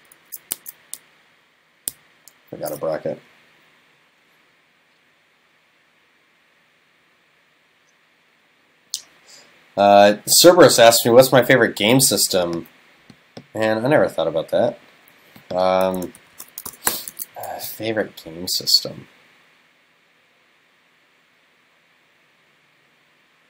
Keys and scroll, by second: 0.6 super+s, 2.4 super+s, 16.2 shift+super+Left, 17.1 super+s.